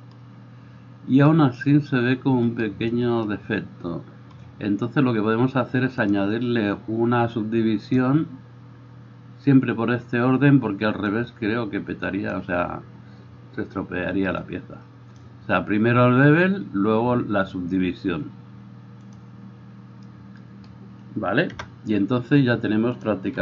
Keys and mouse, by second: 15.3-19.2 middle drag, 19.2-23.1 drag, 21.6 KP_0, 23.1 middle click.